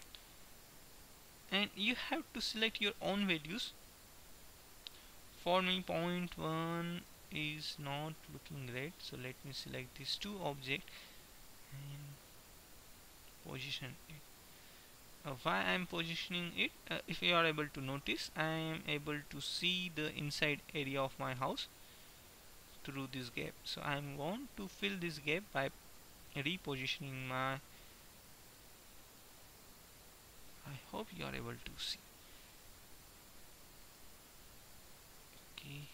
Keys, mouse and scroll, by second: 1.2-2.2 middle drag, 5.3-8.0 middle drag, 9.2-11.7 right drag, 11.3 click, 16.3-19.3 middle drag, 24.0-25.8 middle drag, 25.8-27.3 drag, 28.2-29.3 middle drag, 29.7-30.8 scroll up 4, 31.0-31.3 scroll down 2, 32.2 ctrl+z, 32.8-34.3 middle drag.